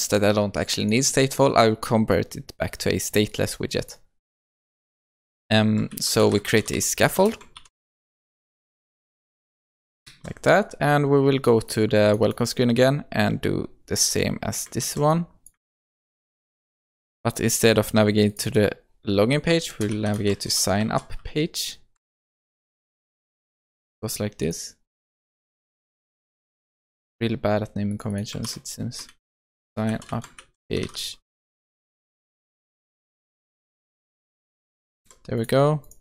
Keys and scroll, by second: 7.2 Return, 10.1 Return, 10.2 ctrl+s, 14.9 ctrl+c, 16.2 ctrl+v, 26.1 ctrl+c, 28.5 shift+F6, 33.2 ctrl+c, 35.0 ctrl+v.